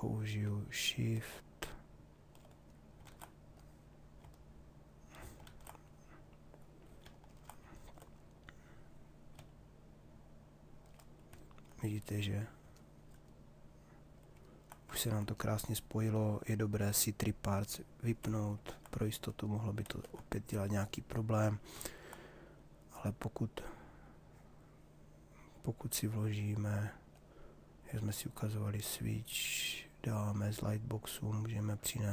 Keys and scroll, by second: 2.8 ctrl+z, 19.4 ctrl+z.